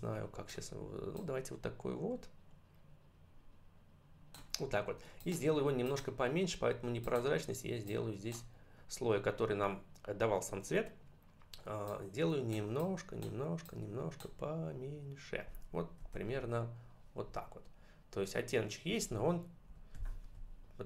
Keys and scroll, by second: 16.0 ctrl+-, 18.8 ctrl+=.